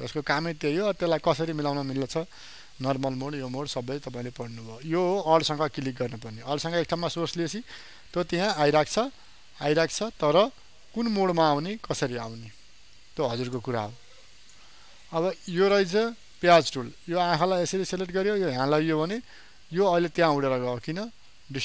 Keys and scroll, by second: 0.7 ctrl+z.